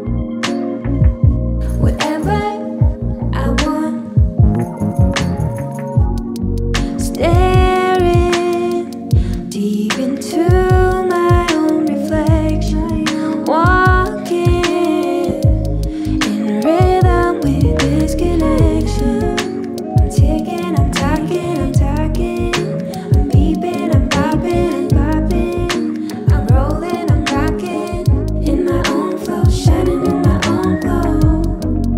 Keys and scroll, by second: 22.6 ctrl+z.